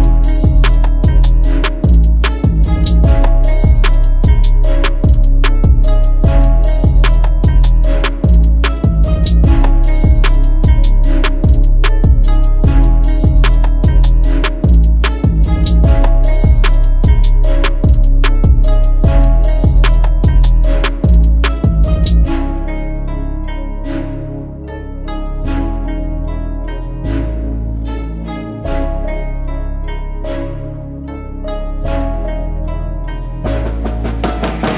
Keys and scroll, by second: 1.5 F3, 10.8 F3, 25.2 Delete.